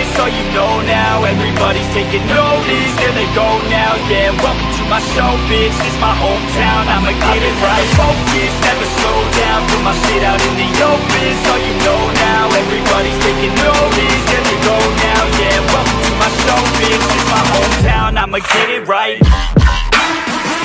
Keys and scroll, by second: 0.3 ctrl+g, 5.6 ctrl+d, 7.3 ctrl+t, 9.6 ctrl+t, 12.5 ctrl+t, 14.1 ctrl+t, 16.5 ctrl+t, 19.7 ctrl+t.